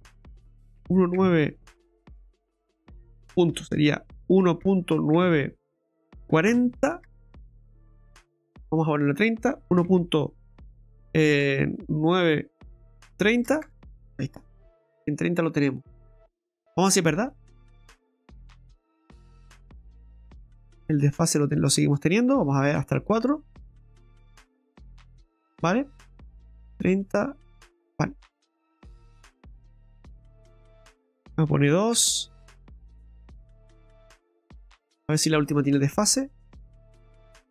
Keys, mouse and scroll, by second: 3.6 BackSpace, 3.8 BackSpace, 8.6 click, 15.0 scroll down 2, 15.4 middle click, 16.6-17.8 scroll down 3, 17.8 click, 19.1-19.6 scroll up 4, 19.8 shift+middle click, 20.2 scroll up 1, 20.8 middle click, 21.6 middle click, 21.7 shift+middle click, 22.2-22.8 scroll down 3, 24.4 click, 26.8 click, 28.6 click, 29.6 click, 33.2 scroll down 2, 34.0 middle click, 34.8 shift+middle click, 35.2-35.6 scroll up 4, 35.7 middle click, 36.6 shift+middle click, 37.1-37.5 scroll up 3.